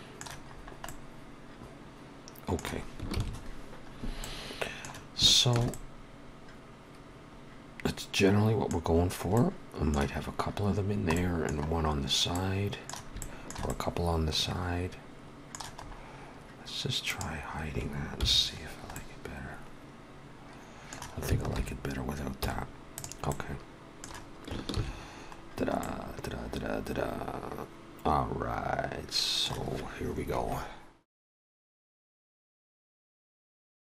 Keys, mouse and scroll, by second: 0.5-0.8 scroll up 2, 0.8 middle click, 3.2 ctrl+s, 3.8-4.2 scroll up 2, 4.2 middle click, 5.2 shift+middle click, 5.7 middle click, 8.9-9.3 scroll down 2, 9.3 middle click, 10.7-11.0 scroll down 2, 11.1 middle click, 12.3 middle click, 13.2 shift+middle click, 13.2 shift+middle click, 13.6 middle click, 15.7-16.1 scroll up 2, 16.9 click, 18.2 h, 18.6 scroll down 2, 18.9 middle click, 21.5 alt+h, 22.2 x, 23.3 middle click, 24.7 ctrl+s, 25.4 scroll down 1, 25.8 middle click.